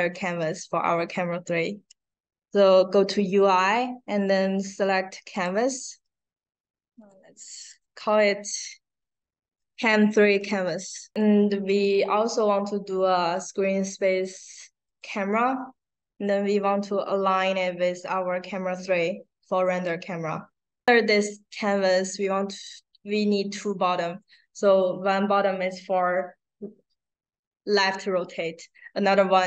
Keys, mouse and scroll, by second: 5.3 click, 6.9 click, 7.6 click, 9.1 a, 9.5 space, 11.0 space, 11.1 click, 14.8 click, 16.6-19.7 drag.